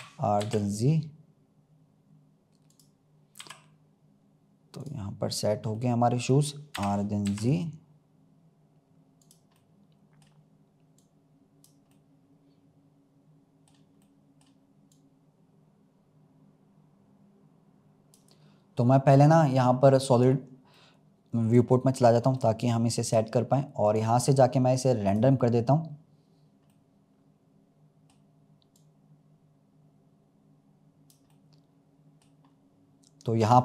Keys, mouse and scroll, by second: 5.3 scroll down 1, 5.6-6.6 middle drag, 6.6 r, 9.5-10.9 middle drag, 10.9 click, 11.9-14.8 middle drag, 14.8 click, 20.1 click, 20.7-22.0 middle drag, 22.0-22.3 scroll down 2, 22.3-23.8 middle drag, 23.8-26.2 drag, 26.2-26.6 scroll up 1, 26.6-28.6 middle drag, 28.6 click, 31.2-32.4 middle drag, 32.4-33.3 scroll up 1, 33.3 click.